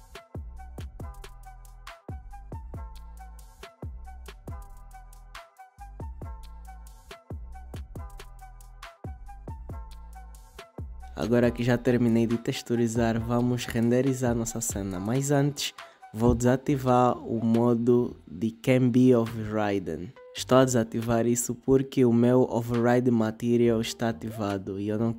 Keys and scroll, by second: 3.6 space.